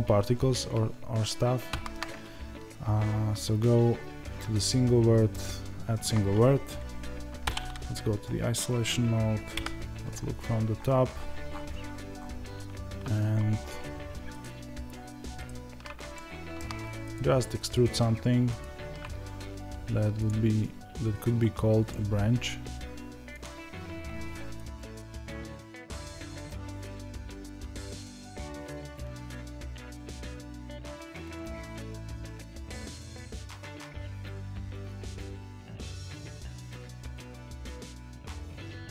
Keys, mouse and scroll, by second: 5.3 shift+a, 7.3 KP_Divide, 10.2-11.4 scroll down 2, 11.4-12.1 scroll up 1, 14.3 ctrl+right click, 16.1-17.1 shift+middle drag, 17.1 ctrl+right click, 20.2 click, 24.6 ctrl+right click, 25.6 click, 25.8 ctrl+right click, 26.0 click, 26.2 ctrl+right click, 26.5 click, 26.6 ctrl+right click, 26.8 click, 27.2 ctrl+right click, 27.4 click, 27.5 ctrl+right click, 27.7 click, 27.9 ctrl+right click, 28.1-30.0 middle drag, 30.0 click, 30.5 a, 34.4 click, 35.6 ctrl+a.